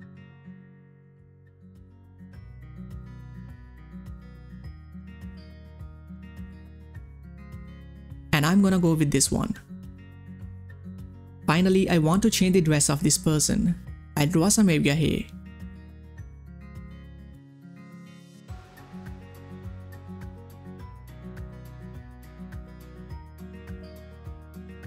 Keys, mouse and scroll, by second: 0.0-2.3 drag, 3.5 ctrl+scroll down 1, 4.2 space, 4.3 click, 4.7 space, 7.2 space, 7.2 click, 9.6-10.2 ctrl+scroll down 1, 10.2 ctrl+space, 10.3 click, 13.0-13.8 ctrl+scroll up 1, 14.3 click, 14.3 click, 14.4-16.4 drag, 20.1 space, 20.2 click, 20.2 space, 20.6 click, 20.7 space, 20.9-23.4 drag, 23.4 typing, 23.8-24.8 drag.